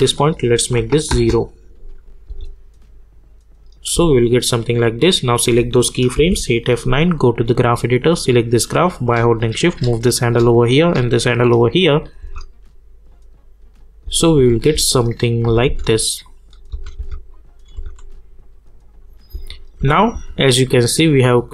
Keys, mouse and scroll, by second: 0.6 click, 1.1 Return, 1.9 click, 2.2 space, 4.9 click, 6.1 F9, 7.0-10.3 drag, 10.3 click, 12.2 space, 16.2 click, 16.7 space, 17.3 click, 17.7 space.